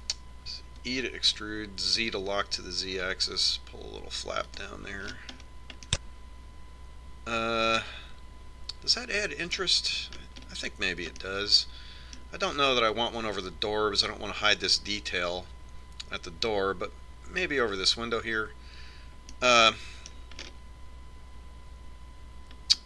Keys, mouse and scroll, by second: 2.1 e, 6.4-9.1 middle drag, 11.5-14.6 middle drag, 11.7-12.8 scroll up 1, 20.8-22.8 middle drag.